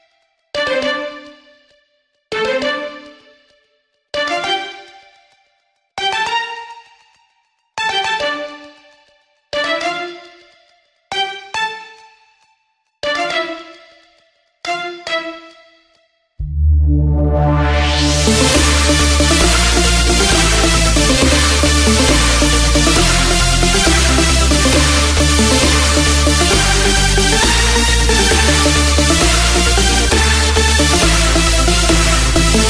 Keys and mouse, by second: 0.6 n, 5.2 KP_6, 5.9 KP_6, 7.2 KP_6, 8.6 KP_6, 11.9 KP_4, 21.3 a, 24.6 z, 31.9 b.